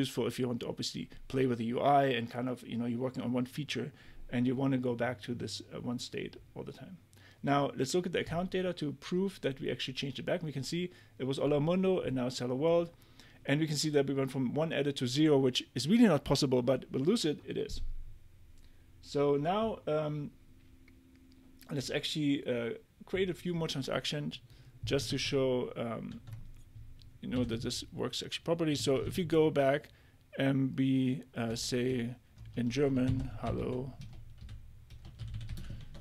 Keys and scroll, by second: 25.1 super+Tab, 27.1-29.0 typing, 31.5 i, 31.9 Delete, 33.1-36.0 typing, 34.0 Delete.